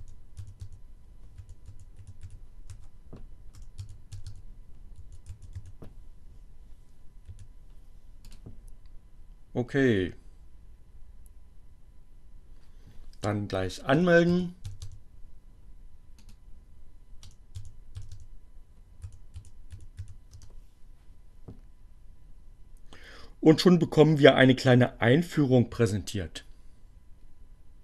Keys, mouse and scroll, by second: 0.0-3.5 typing, 7.1 4, 8.0 click, 13.2-14.3 typing, 15.9 click, 16.7-20.1 typing.